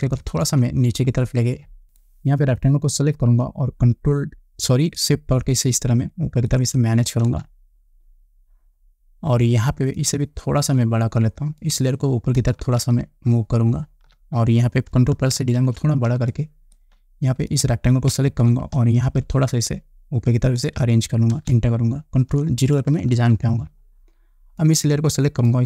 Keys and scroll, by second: 0.6 shift+Down, 3.6 ctrl+t, 7.8 Return, 13.3 shift+Up, 15.9 ctrl+=, 19.0 ctrl+t, 21.9 Return, 23.5 ctrl+0.